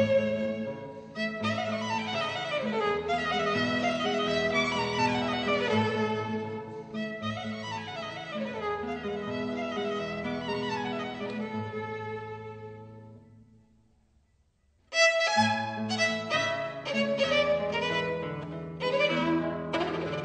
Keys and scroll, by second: 4.3 e, 8.9 super+z, 12.6 b, 13.4 super+z.